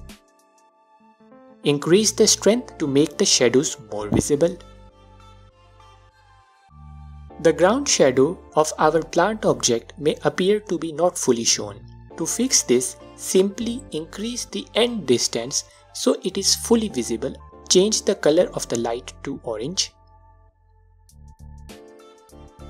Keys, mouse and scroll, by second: 1.3-2.2 drag, 3.1-4.9 drag, 7.4 click, 8.6-10.6 drag, 16.8 KP_Enter, 17.7-20.6 drag.